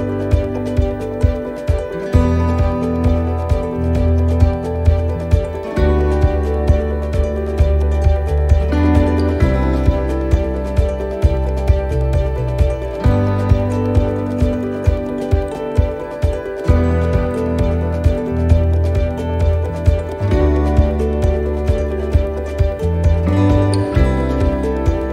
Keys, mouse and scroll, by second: 1.1 l, 1.5 x, 4.5-7.5 typing, 10.3 l, 12.5 l, 15.0 x, 16.8 shift+middle click, 17.8 right click, 18.7-21.6 typing, 23.6 l, 24.7 x.